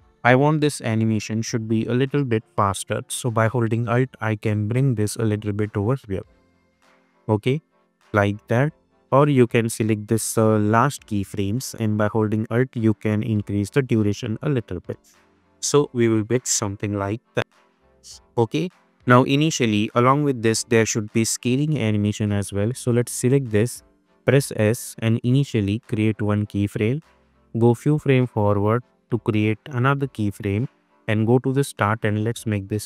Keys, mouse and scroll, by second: 0.0 -, 0.8-1.4 click, 1.1 space, 3.7-5.2 alt+drag, 6.6 space, 9.2-10.4 drag, 12.1-14.0 alt+drag, 14.9 space, 16.9-17.5 click, 17.3 space, 19.0-19.6 drag, 24.4 s, 26.0 click, 27.3 =, 27.5 =, 28.2-29.2 drag.